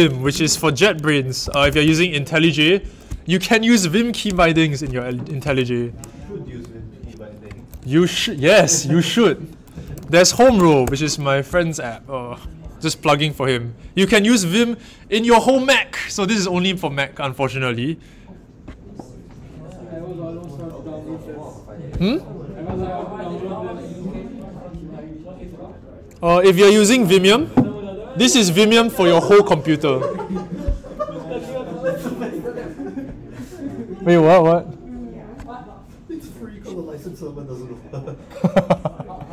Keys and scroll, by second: 0.0-2.9 typing, 8.1 super+t, 9.4-11.0 typing.